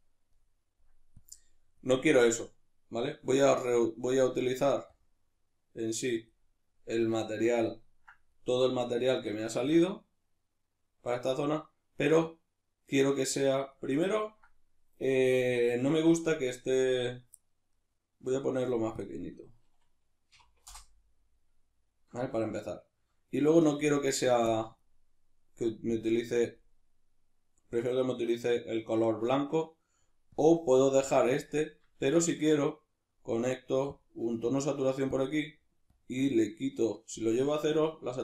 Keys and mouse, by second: 1.2 click, 3.6-4.9 middle drag, 4.9-7.2 drag, 7.2-19.0 shift+middle drag, 19.0-22.3 shift+drag, 20.7 Return, 22.3-24.5 shift+middle drag, 24.5 click, 24.5-25.9 middle drag, 25.9 click, 30.4 click, 32.0 shift+a, 35.2 click, 36.0-38.2 drag.